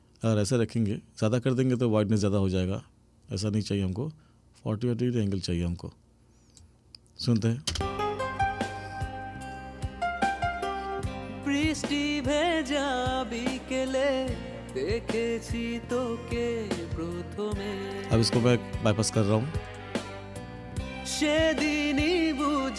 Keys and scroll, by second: 7.8 space.